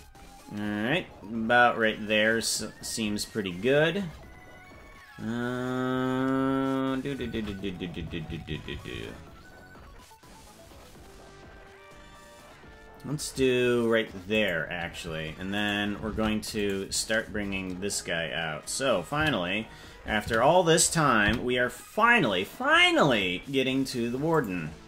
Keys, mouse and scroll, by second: 5.5 scroll up 3, 7.1 scroll up 1, 7.3 shift+`, 15.6 right click, 16.1 ctrl+Tab, 16.7 right click, 19.2 a, 20.2 a, 21.2 i.